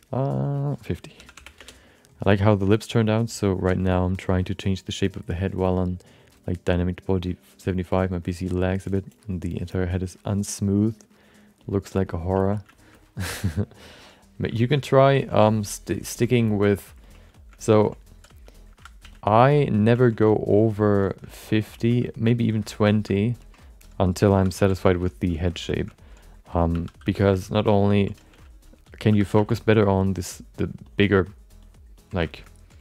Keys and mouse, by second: 11.6 alt+shift+middle click, 12.0 alt+middle click, 12.4 ctrl+middle click, 12.7 alt+shift+middle click, 12.9 alt+middle click, 13.2 shift+middle click, 13.4 alt+middle click, 14.5 shift+middle click, 14.7 alt+middle click, 15.2 ctrl+middle click, 15.4 shift+middle click, 15.6 alt+middle click, 16.1 ctrl+middle click, 16.4 alt+shift+middle click, 16.7 alt+middle click, 17.0 ctrl+middle click, 17.3 alt+shift+middle click, 17.7 ctrl+middle click, 18.7 z, 19.0 f, 19.4 shift+middle click, 19.6 alt+middle click, 20.0 ctrl+alt+middle click, 20.3 alt+shift+middle click, 20.6 alt+middle click, 21.0 alt+shift+middle click, 21.3 alt+middle click, 21.7 ctrl+middle click, 22.0 shift+middle click, 22.2 alt+middle click, 22.6 ctrl+middle click, 22.9 alt+shift+middle click, 23.1 alt+middle click, 23.4 ctrl+alt+middle click, 24.3 2, 24.5 f, 24.8 shift+middle click, 25.1 alt+middle click, 25.4 ctrl+middle click, 25.7 alt+shift+middle click, 26.7 2, 27.0 f, 27.3 shift+middle click, 27.6 alt+middle click, 27.9 ctrl+alt+middle click, 28.3 f, 29.1 2, 29.3 f, 29.7 ctrl+click, 30.0 ctrl+click, 30.6 ctrl+click, 30.8 ctrl+click, 31.1 ctrl+click, 31.6 ctrl+click, 31.9 ctrl+click, 32.4 alt+middle click.